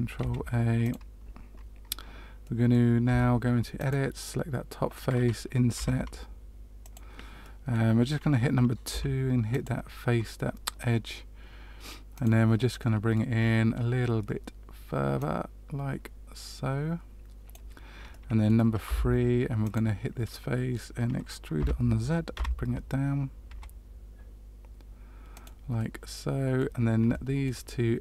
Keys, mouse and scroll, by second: 0.1 ctrl+a, 2.4 middle click, 3.0 Tab, 3.7 click, 5.7 i, 7.4 middle click, 8.8 2, 9.4 click, 12.1 click, 12.7 middle click, 13.3-15.1 scroll up 3, 15.1 click, 15.1 scroll up 1, 18.0 middle click, 18.8 3, 19.6 click, 20.3 middle click, 21.5 e, 25.7 middle click, 27.4 shift+middle click.